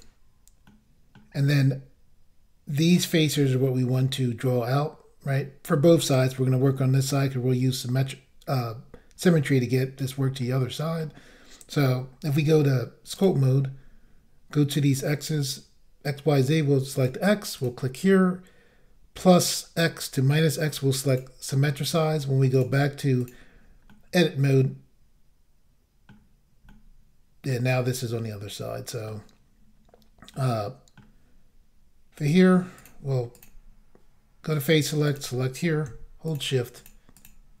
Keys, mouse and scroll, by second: 0.7 middle click, 10.4 middle click, 12.2 click, 13.1 click, 16.9 click, 17.6 click, 21.1 click, 22.5 click, 23.2 click, 23.9 middle click, 26.7 middle click, 28.1 middle click, 30.3 middle click, 32.2 click, 32.8 click, 33.4 click, 34.5 click, 35.1 click, 36.3 shift+click, 36.8 shift+click, 37.2 shift+double click.